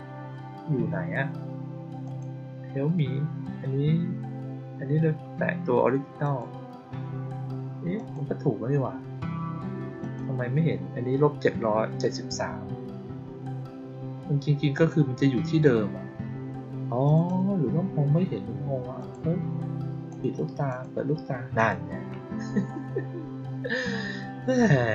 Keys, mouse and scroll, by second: 1.9 click, 6.1 click, 7.9 click, 9.9 click, 14.6 click, 17.0 click, 17.2 click, 18.9 click, 20.0 click, 20.6 click, 21.5 click.